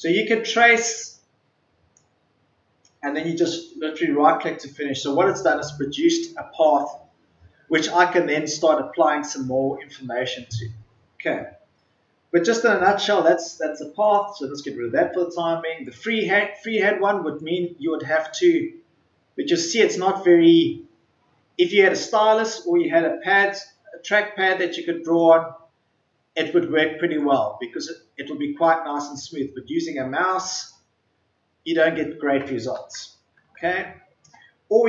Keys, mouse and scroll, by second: 3.4 right click, 13.9 click, 14.4 Delete, 15.8-30.7 drag.